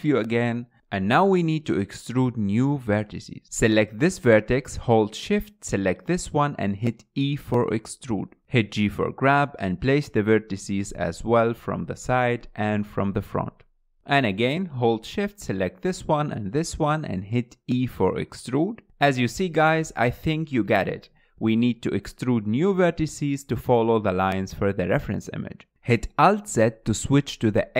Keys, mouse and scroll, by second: 0.4 KP_1, 1.5 scroll up 3, 2.3 shift+middle click, 3.1 click, 5.1 shift+click, 6.8 e, 9.3 click, 10.2 g, 12.1 g, 13.5 click, 13.7 g, 14.9 click, 15.4 shift+click, 15.9 e, 17.5 click, 17.7 g, 19.5 shift+middle click, 19.9-25.7 typing, 20.6 click, 21.4 click, 21.5 shift+middle click, 21.8 click, 22.2 shift+middle click, 22.4 click, 22.6 shift+middle click, 23.0 click, 23.3 shift+middle click, 23.8 shift+middle click, 23.8 click, 24.9 shift+middle click, 25.1 shift+click, 25.3 click, 25.5 shift+middle click, 25.9 alt+z, 26.5 alt+z, 26.8-27.3 scroll down 8, 27.4-27.7 shift+middle drag.